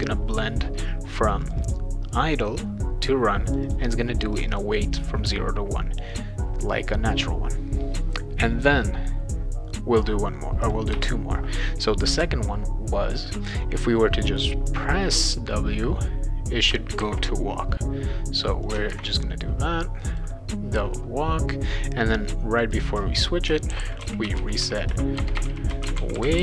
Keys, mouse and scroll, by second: 1.4 click, 1.6 click, 3.5 click, 3.6 click, 4.3 click, 4.5 click, 10.6 click, 10.9 Return, 14.7-16.7 drag, 17.0 ctrl+c, 18.6 click, 18.9 ctrl+v, 20.1 click, 22.6 click, 23.4-26.4 typing.